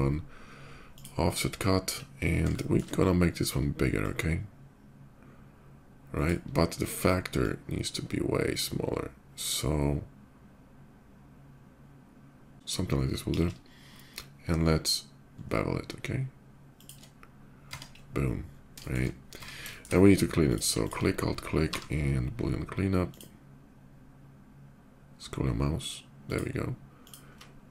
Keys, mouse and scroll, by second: 0.6 click, 2.3 middle click, 3.8-6.0 shift+drag, 7.1-12.5 shift+drag, 12.9 middle click, 13.5 ctrl+shift+b, 16.5 click, 17.5 Tab, 17.7 middle click, 18.3 shift+middle click, 18.9 shift+middle click, 19.2 Tab, 19.4 shift+middle click, 20.2 click, 20.5 click, 21.4 y, 22.8 click, 26.0 click, 26.6 click, 27.5 alt+click.